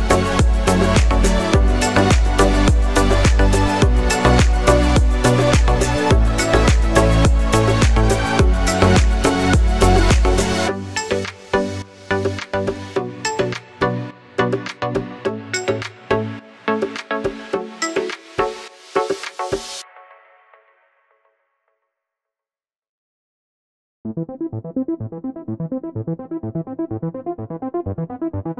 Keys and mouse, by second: 2.5 s, 4.3 s, 5.2 middle click, 5.6-8.8 drag, 6.3 z, 8.1 s, 8.8 middle click, 9.2-17.6 drag, 10.3 z, 16.6 s, 17.6 middle click, 18.3-25.8 drag, 21.8 shift+d, 24.3 KP_7, 25.4 r, 25.8-28.5 middle drag, 25.9 g, 26.4 r, 26.8 g.